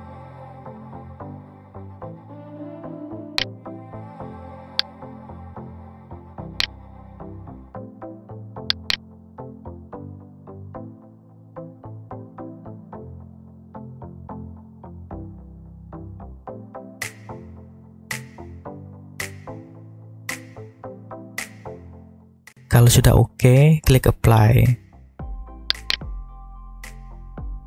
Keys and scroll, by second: 10.2 g, 13.8 Escape, 15.0 r, 16.9 Escape, 17.8 s, 20.4 Escape.